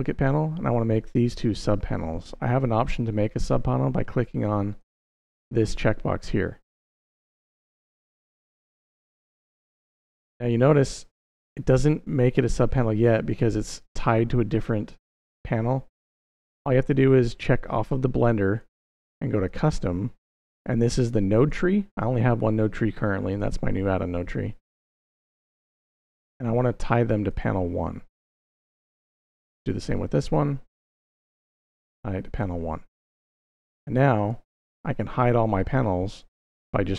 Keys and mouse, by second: 1.8 middle drag, 4.5 click, 7.7 click, 18.3-19.3 drag, 21.2-23.3 drag, 25.0-27.1 drag, 29.4-30.2 drag, 30.9-32.2 drag, 35.9 click.